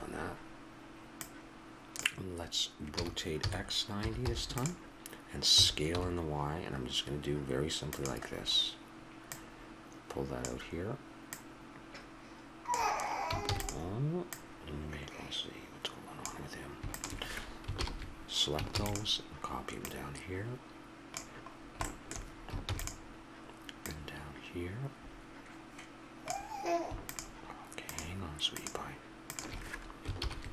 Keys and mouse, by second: 2.9 r, 5.5 s, 9.3-13.1 drag, 13.5 shift+d, 14.2-16.2 drag, 16.9-18.8 drag, 17.8 ctrl+l, 18.8 shift+d, 19.8-21.1 drag, 21.6-23.8 middle drag, 22.7 shift+d, 23.8-26.0 drag, 27.1-30.5 drag, 30.1 ctrl+l.